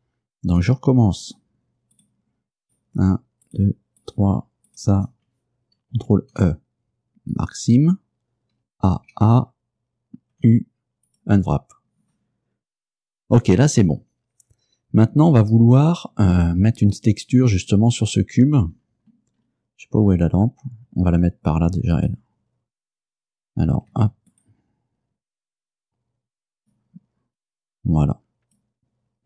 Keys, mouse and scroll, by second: 0.7 right click, 1.3 shift+right click, 2.0 shift+right click, 2.8 shift+right click, 3.5 shift+right click, 4.1 shift+right click, 4.8 shift+right click, 6.2 ctrl+e, 7.4 click, 8.7 a, 10.4 u, 11.2 click, 18.8-19.3 scroll down 1, 19.4-19.8 scroll down 2, 20.1-20.7 scroll up 4, 20.8 scroll down 2, 22.0 right click, 24.0 Tab, 24.4 right click, 25.6-27.0 drag, 27.4-28.8 drag.